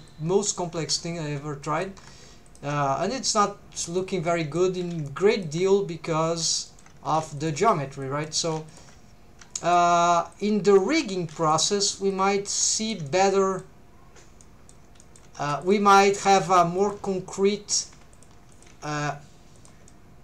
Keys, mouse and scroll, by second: 0.1 click, 0.9 alt+a, 1.0 middle click, 1.6 click, 1.6 right click, 2.0 3, 2.5 alt+shift+click, 3.4 click, 4.3 middle click, 4.8 alt+a, 5.3 alt+shift+click, 6.1 click, 6.7 shift+middle click, 7.1 alt+a, 7.4 alt+shift+click, 8.0 click, 8.4 alt+a, 8.7 alt+shift+click, 9.6 shift+middle click, 10.3 click, 11.2 alt+a, 11.5 alt+shift+click, 12.1 click, 12.8 shift+middle click, 13.1 middle click, 14.4 middle click, 15.0 shift+middle click, 15.6 click, 16.1 g, 16.8 shift+click, 17.7 click, 17.9 g, 18.1 shift+click, 18.5 click, 18.7 g, 19.6 shift+click, 19.9 middle click.